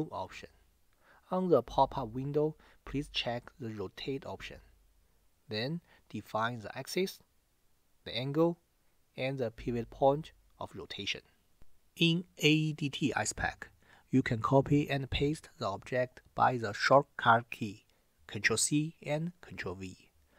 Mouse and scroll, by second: 9.0 click, 10.3 click.